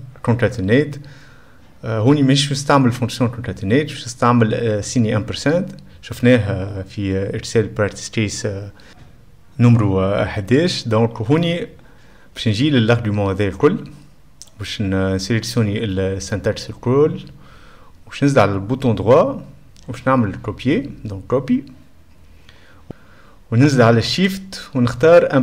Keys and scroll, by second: 24.5 shift+4.